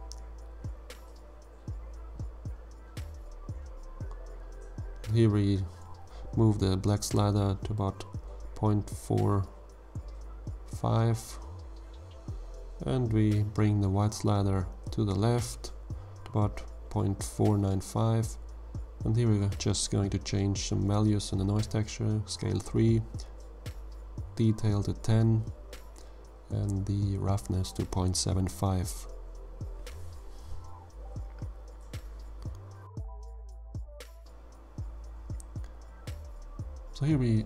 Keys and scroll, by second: 22.6 3, 22.9 Tab, 24.7 1, 24.9 0, 25.4 Tab, 27.2 ., 27.6 7, 27.8 5, 28.0 Return, 35.8-37.3 typing.